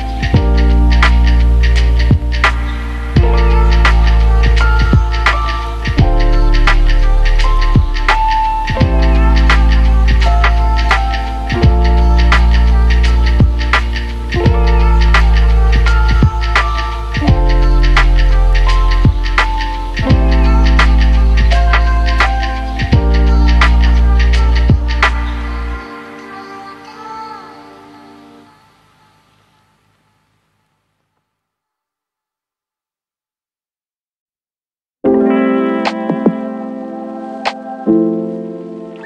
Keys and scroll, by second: 5.2 ctrl+1, 9.4 Delete, 14.0 ctrl+Delete.